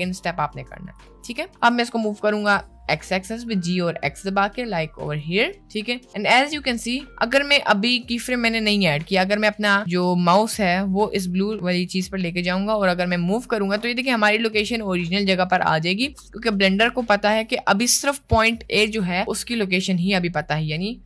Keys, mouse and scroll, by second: 1.7 click, 2.4 g, 5.5 middle click, 13.1-14.1 drag, 17.0 click, 20.3 click.